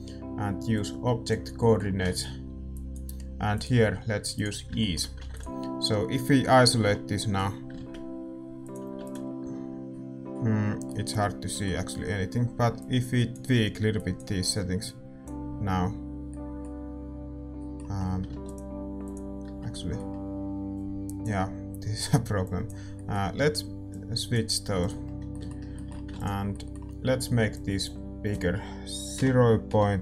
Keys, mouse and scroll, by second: 4.8 click, 6.8 KP_Divide, 7.1-10.2 middle drag, 7.8 shift+z, 8.6-30.0 drag, 22.9-30.0 middle drag.